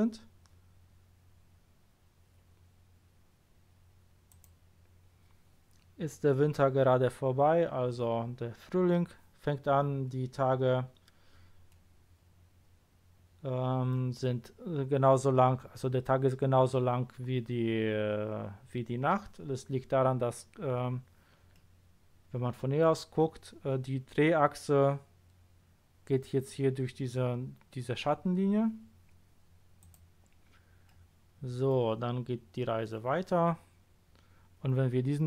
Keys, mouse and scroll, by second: 4.3 click, 11.7-12.6 middle drag, 21.5-22.8 middle drag, 29.8 click, 30.8 middle drag.